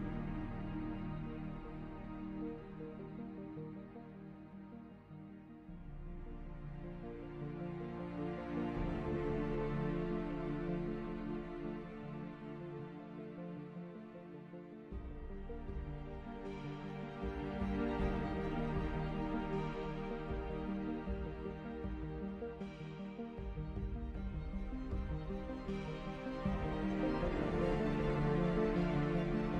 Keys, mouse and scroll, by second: 1.7 click, 4.9 click, 7.9 click, 9.6-10.9 middle drag, 10.9 click, 13.3 click, 15.1-16.8 middle drag, 16.8 click, 27.4 click.